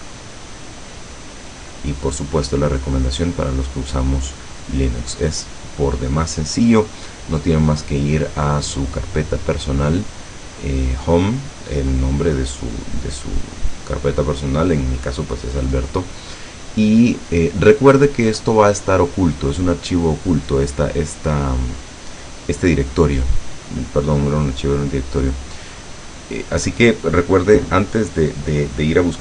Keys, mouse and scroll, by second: 0.2-1.3 scroll down 2, 8.5-10.2 drag, 10.4 click, 12.0-13.2 drag, 16.1 click, 18.1-20.0 drag, 21.6-23.2 drag.